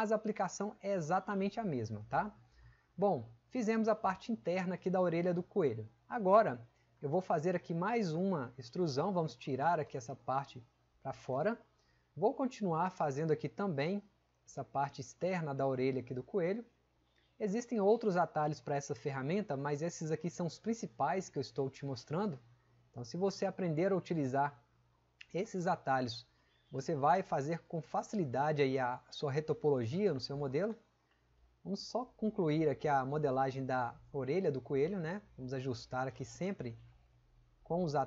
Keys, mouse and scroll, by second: 6.0-6.4 drag.